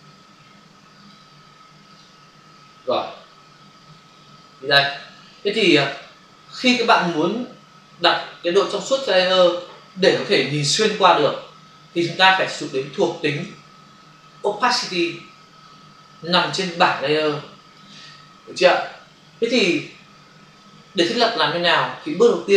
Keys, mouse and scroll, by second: 0.9 click, 1.1 click, 3.3 f, 4.1 ctrl+click, 5.1 click, 5.9 ctrl+click, 9.1 click, 12.6 space, 12.8 ctrl+click, 14.3 click, 15.3 space, 17.2 click.